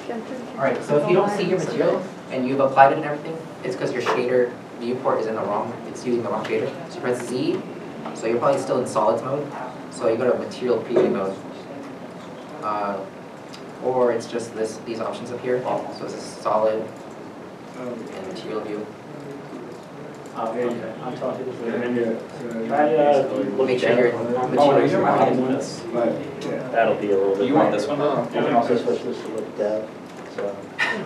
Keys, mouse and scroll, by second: 7.3 middle click, 7.3 z, 10.1 z.